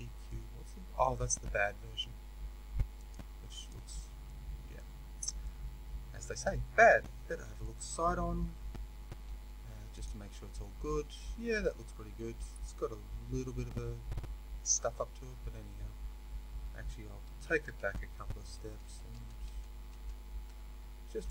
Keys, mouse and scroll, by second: 0.2-2.9 middle drag, 2.9-4.2 drag, 4.2-21.3 middle drag, 4.9-5.3 scroll up 2, 7.4 KP_3, 10.0 z, 15.3-17.4 scroll up 2, 17.4 ctrl+z.